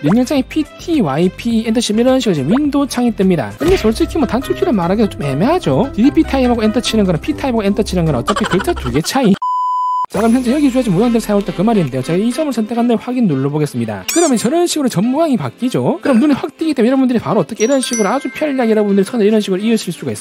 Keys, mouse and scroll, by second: 0.9 t, 1.8 e, 3.3 click, 12.8 click, 13.7 click, 16.6 1, 16.9 right click, 17.4 shift+click, 17.8 shift+right click, 18.1 d, 18.5 click, 18.8 right click, 19.0 right click, 19.3 click, 19.6 shift+right click, 19.9 d, 20.1 click.